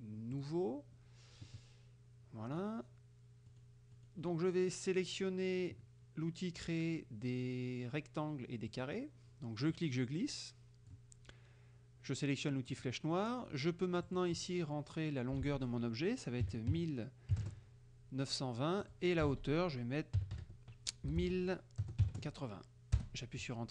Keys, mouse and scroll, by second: 0.4 click, 2.6 click, 3.6 click, 4.0 click, 8.7 click, 9.8-11.1 drag, 12.8 click, 14.1 click, 15.5 ctrl+a, 16.5 KP_1, 16.7 KP_9, 17.5 KP_0, 18.9 click, 19.4 ctrl+a, 20.2-22.1 typing, 23.1 Return.